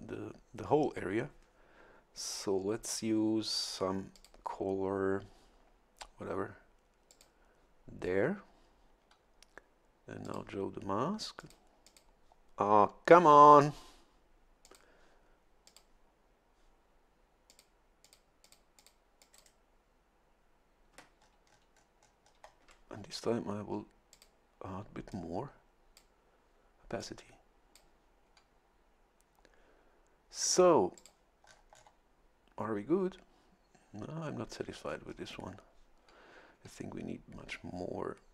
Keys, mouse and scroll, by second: 4.1 click, 7.1 click, 10.2 click, 11.4 click, 11.8 click, 14.6 click, 15.7 click, 17.5 click, 18.0 click, 18.4 click, 18.8 click, 19.2 click, 21.2 shift+scroll up 2, 24.1 click, 25.1-26.3 drag, 27.0-28.2 drag, 31.0 click, 31.4 scroll down 1, 34.9-35.5 scroll up 1.